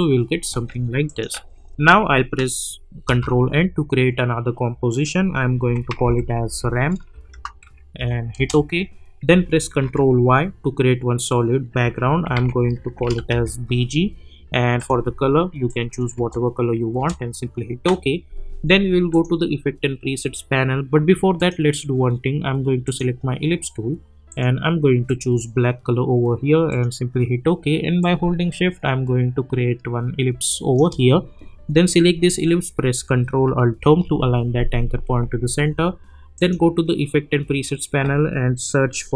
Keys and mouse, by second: 1.0 click, 3.0 ctrl+n, 5.4-7.9 typing, 8.3 Return, 9.4 ctrl+y, 11.8 s, 12.3 ctrl+a, 13.0 shift+b, 13.3 g, 14.7 click, 16.1 Return, 19.1 click, 21.4-33.8 drag, 33.8 ctrl+alt+Home, 37.7 click.